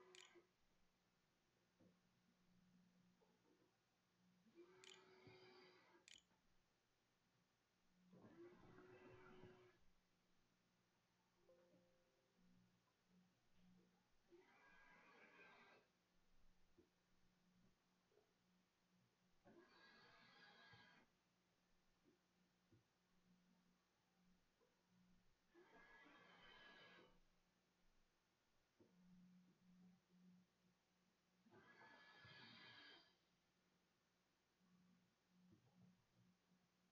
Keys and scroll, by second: 1.2-2.0 typing, 5.4 ctrl+a, 5.9 ctrl+s, 6.3 a.